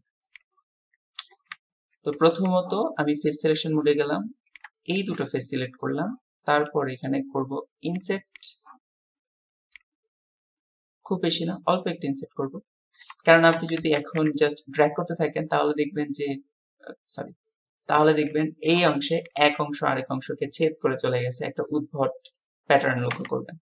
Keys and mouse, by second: 1.6 Tab, 1.9 click, 5.6 click, 7.9 click, 8.3-13.1 drag, 13.2 shift+click, 14.0 ctrl+z.